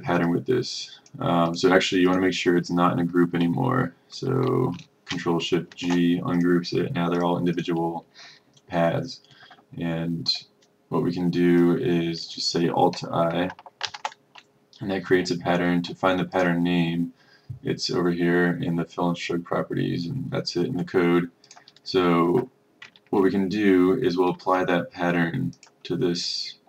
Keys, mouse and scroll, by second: 5.8 ctrl+shift+g, 6.5 click, 14.0 alt+i, 16.4 click, 23.3 ctrl+scroll, 25.7 click.